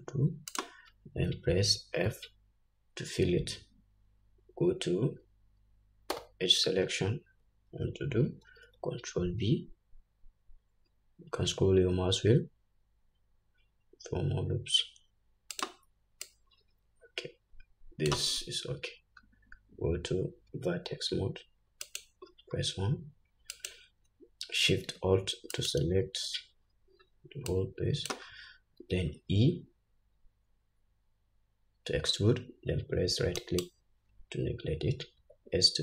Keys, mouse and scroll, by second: 2.3 f, 6.5 2, 8.8 ctrl+b, 16.6-22.4 drag, 20.9 1, 22.6-23.9 scroll up 2, 23.9 click, 25.9 alt+shift+click, 27.0-27.8 scroll down 1, 27.8 scroll down 1, 27.9-35.8 drag, 29.3 e.